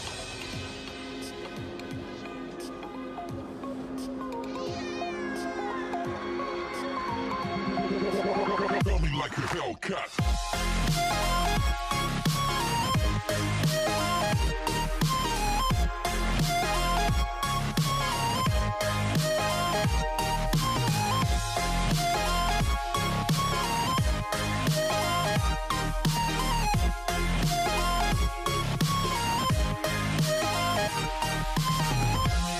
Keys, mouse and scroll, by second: 2.8 Tab, 3.4 scroll up 3, 4.7 ctrl+b, 9.5 Tab, 10.1 right click, 10.9-11.3 scroll up 1, 11.3 Tab, 12.9 click, 16.7 click, 17.7-18.7 scroll down 1, 18.7 scroll down 2, 18.8 click, 21.5 click, 21.9-22.7 scroll up 3, 22.7 drag, 23.5 click, 26.6 click, 27.9-29.5 scroll up 3, 29.5 click, 30.7 click.